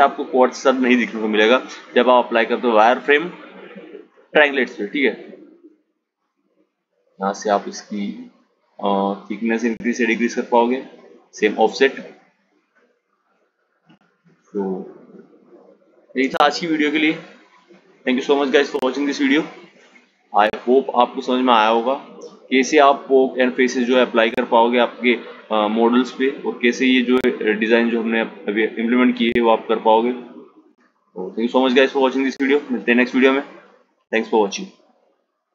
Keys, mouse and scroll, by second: 3.9 click, 4.6-7.7 drag, 11.9 click, 14.2 Tab, 16.9 Tab, 20.3 click, 28.5-31.6 drag.